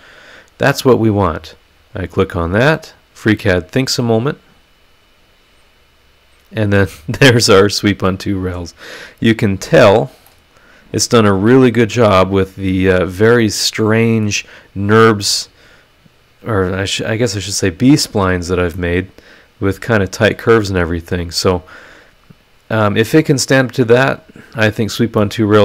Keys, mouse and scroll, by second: 1.7 click, 4.7 click, 6.9 middle click, 7.0 click, 7.0 right click, 7.2 scroll up 1, 9.0 click, 9.5 scroll down 1, 10.3 middle click, 10.3-14.4 drag, 10.3-14.4 right drag, 12.7-14.4 middle drag, 18.7-20.5 drag, 20.7 click, 21.1-22.8 middle drag, 21.2-24.9 drag, 25.2-25.6 middle drag, 25.3-25.6 right drag.